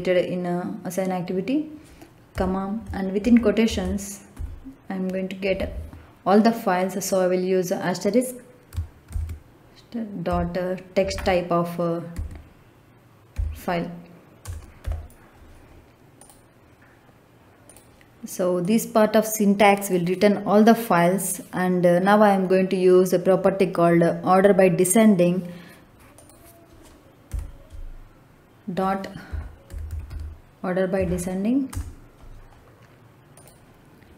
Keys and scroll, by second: 2.2 ,, 3.1 shift+', 4.2 Left, 9.0 shift+8, 10.2 ., 11.0 t, 12.1 x, 13.3 y, 14.7 t, 27.2 ., 29.2 o, 29.6 r, 29.8 d, 30.0 e, 30.9 Down, 31.6 Return.